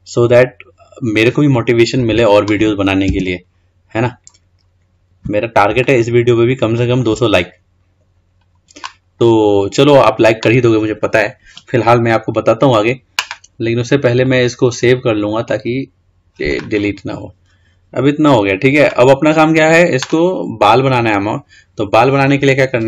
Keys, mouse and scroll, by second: 3.2 Tab, 3.6-4.5 scroll down 4, 4.5-6.0 scroll up 2, 6.0-7.6 shift+middle drag, 7.6-8.0 scroll down 3, 8.0-11.1 scroll up 3, 14.4-16.9 drag, 16.9-17.2 scroll down 5, 17.5 scroll up 2, 17.8-19.3 scroll down 3, 19.3-21.6 scroll up 3, 21.6-22.8 scroll up 1.